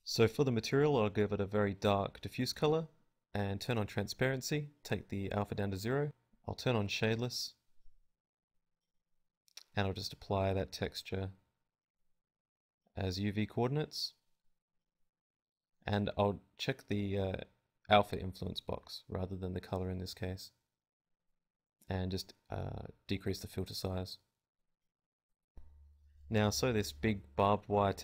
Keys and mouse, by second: 1.1-4.9 drag, 6.3-15.2 drag, 11.3-15.2 right drag, 25.7 click, 26.1 KP_Decimal, 26.5 z, 26.7 z.